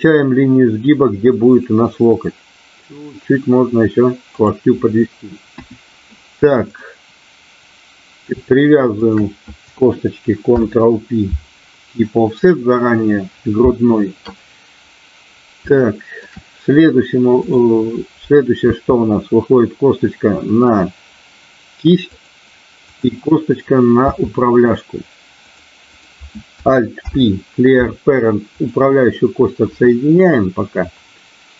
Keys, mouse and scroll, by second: 4.3 click, 5.4 KP_1, 8.9 shift+click, 10.4 ctrl+p, 15.8 shift+middle click, 18.8 e, 22.1 click, 22.8 click, 24.1 e, 27.1 alt+p, 30.4-31.5 middle drag.